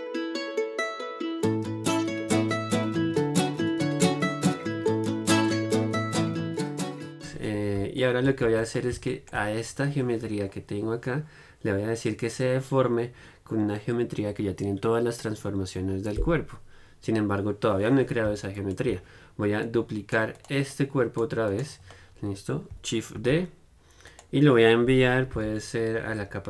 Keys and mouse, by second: 0.0-1.6 typing, 0.0 middle click, 0.2 click, 0.3 right click, 0.7 click, 1.7 right click, 1.8 middle click, 2.1 right click, 2.8-6.7 typing, 4.1 click, 4.1 right click, 4.2 middle click, 4.4 right click, 4.8 click, 4.8 right click, 5.2 click, 5.4 right click, 6.0 middle click, 6.8 middle click, 7.1 Tab, 7.2-11.9 middle drag, 8.7 Tab, 18.8-20.6 drag, 19.9-22.2 right drag, 22.2-23.7 middle drag, 23.7 shift+d, 25.6 m.